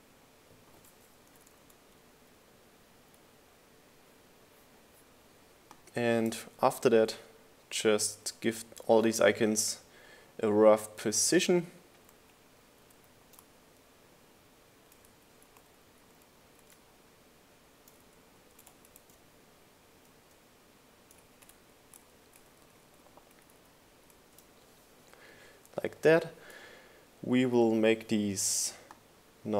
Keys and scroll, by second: 5.1 shift+Left, 7.4 shift+Left, 10.7 shift+Down, 10.9 shift+Left, 14.1 shift+Up, 14.4 shift+Left, 14.7 shift+Up, 15.1 shift+Left, 17.4 shift+Down, 20.4 shift+Down, 20.6 shift+Right, 22.3 shift+Left, 22.7 shift+Right.